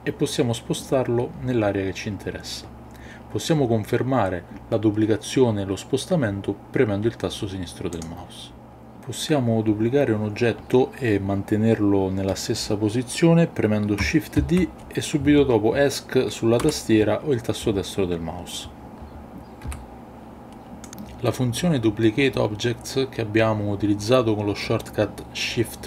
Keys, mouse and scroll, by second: 8.0 click, 14.4 shift+d, 16.6 Escape, 19.6 g, 20.9 click.